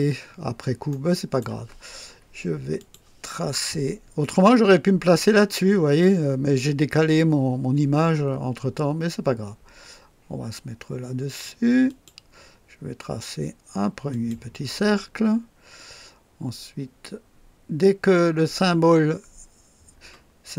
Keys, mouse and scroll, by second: 0.4 scroll up 1, 0.9-1.5 right drag, 2.7 click, 11.8 click, 14.1 click.